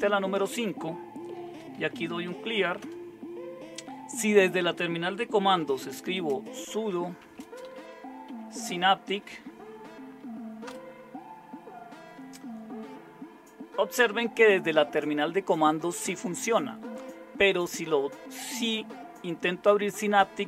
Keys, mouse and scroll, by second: 1.3-2.7 typing, 2.7 Return, 5.2-8.8 typing, 9.1 Tab.